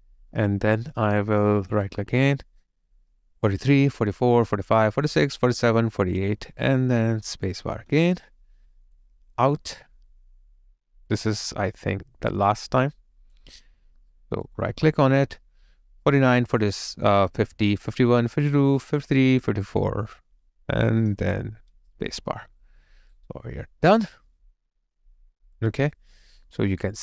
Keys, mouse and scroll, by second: 1.9 right click, 4.0 double click, 7.8 space, 14.5 right click, 22.5 space, 22.6 alt+right click, 26.8 alt+click.